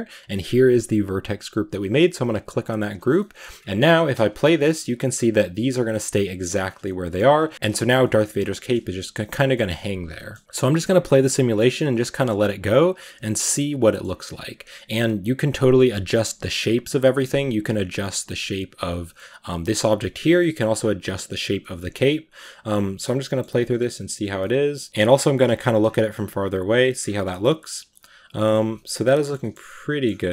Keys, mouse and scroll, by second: 3.0 middle drag, 3.3-3.6 scroll down 4, 3.9 space, 4.8-5.2 middle drag, 5.2-5.8 scroll up 3, 6.7 scroll down 3, 6.9-7.5 middle drag, 7.5 scroll down 1, 8.3-10.4 middle drag, 10.4-10.9 scroll up 4, 11.9-12.9 middle drag, 12.9-13.3 scroll down 2, 13.3-16.9 shift+middle drag, 17.1 middle drag, 17.4 scroll up 1, 18.7 right click, 19.2-21.1 middle drag, 21.1 right click, 21.9-24.9 middle drag, 24.9 scroll down 2, 25.1-25.7 middle drag, 25.7 scroll down 1, 25.9-26.9 middle drag, 26.9 scroll up 6, 27.1-30.3 middle drag.